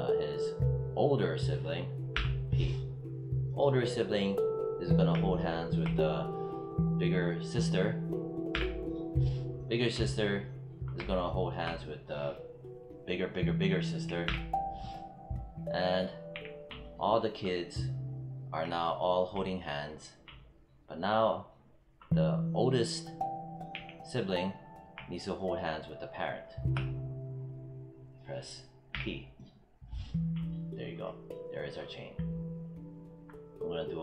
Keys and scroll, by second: 2.0 p, 8.4 p, 14.1 p, 16.2 w, 23.6 z, 28.8 p.